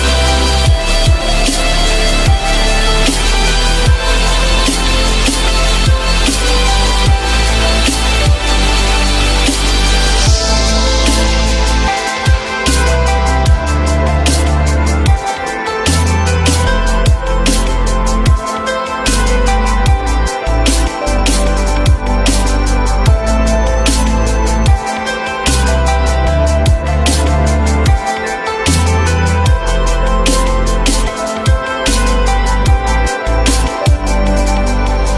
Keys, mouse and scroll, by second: 5.3 F3, 5.9 alt+middle click, 7.0 alt+middle click, 8.7 F3, 9.5 alt+middle click, 10.5 alt+middle click, 13.3 q, 14.9 shift+click, 15.8 ctrl+click, 16.4 shift+click, 17.6 F3, 18.8 ctrl+click, 19.6 alt+middle click, 20.1 alt+middle click, 21.1 ctrl+click, 21.9 alt+middle click, 27.6 F3, 28.4 alt+middle click, 32.2 4.